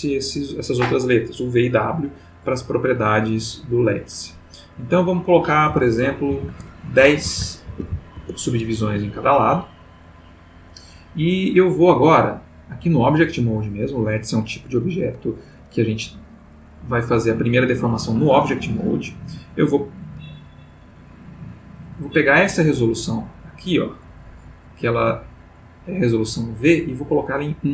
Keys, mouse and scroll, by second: 3.4 middle click, 4.8 click, 5.6 1, 6.5 Tab, 7.0 1, 7.2 0, 7.4 Tab, 7.7 1, 7.8 0, 8.1 Return, 9.2-10.8 middle drag, 11.9 click, 20.8-21.8 middle drag, 24.8-27.7 drag.